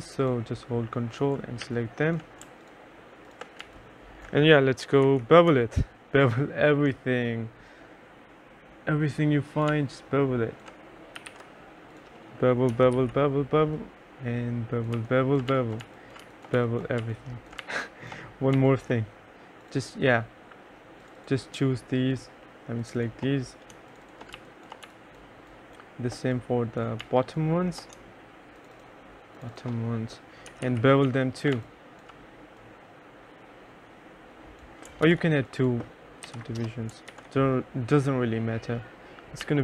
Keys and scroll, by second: 1.7 3, 3.7-6.1 typing, 9.8 3, 11.0-13.1 typing, 15.0-17.7 typing, 24.4 2, 24.9 1, 27.1 2, 30.3-32.1 typing, 35.1 ctrl+z, 36.3 2, 36.6 Return, 37.2 ctrl+z, 39.5 2.